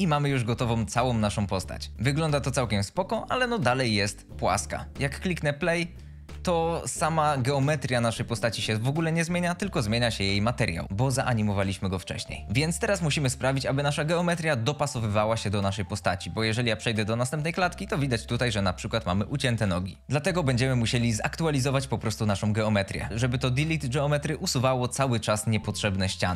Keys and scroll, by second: 1.1 a, 1.9 shift+Left, 6.0 space, 16.8 Right.